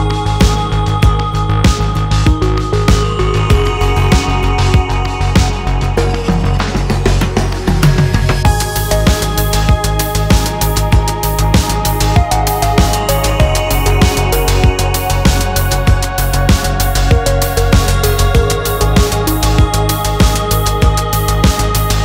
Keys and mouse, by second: 0.3 alt+s, 2.3 Tab, 2.7 shift+click, 3.4-3.8 shift+drag, 4.3 Tab, 4.6 2, 4.8 click, 5.6 shift+click, 7.3 ctrl+r, 9.7 ctrl+b, 12.6 alt+e, 15.8 shift+click, 16.8 shift+click, 18.3 shift+click, 18.6 click, 19.2 2, 20.2 ctrl+r.